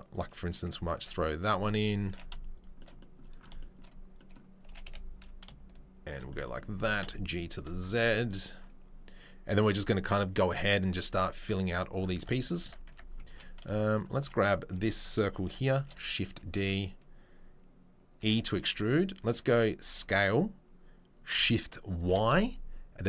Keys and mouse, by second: 0.1-6.0 middle drag, 0.9 s, 2.0 g, 4.6 g, 6.1-11.5 middle drag, 11.5 click, 11.6-23.0 middle drag, 12.1 Tab, 12.6 Tab, 12.8 Tab, 13.2 3, 15.7 shift+d, 18.2 e, 19.8 s.